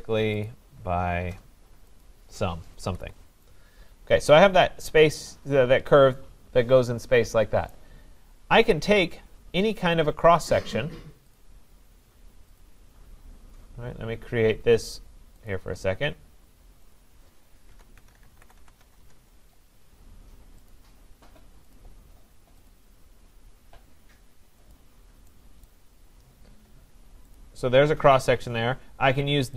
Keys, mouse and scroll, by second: 0.0-1.1 typing, 0.4 click, 2.0 click, 2.8 Escape, 3.0 Escape, 7.7 right click, 8.4-9.0 scroll, 9.0 middle click, 9.1 middle click, 9.2 middle click, 11.4 click, 12.6 click, 15.5 click, 16.9 click, 17.7-19.3 typing, 20.7 click, 21.7 click, 22.7 click, 24.7 click, 25.7 right click, 25.9-26.9 scroll, 27.4 click.